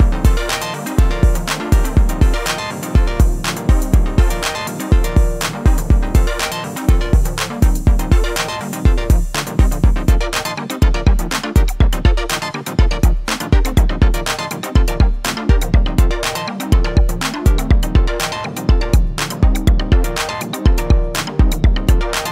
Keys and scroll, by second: 0.5 a, 1.6 ctrl+b.